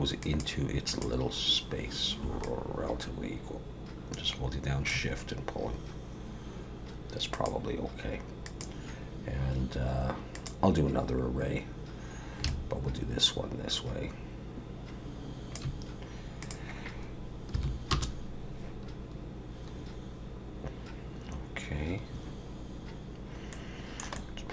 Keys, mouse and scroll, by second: 0.2 click, 0.9 click, 2.4 shift+click, 7.3 click, 8.4 click, 12.4 shift+click, 16.4 click, 23.5 middle click, 24.1 middle click.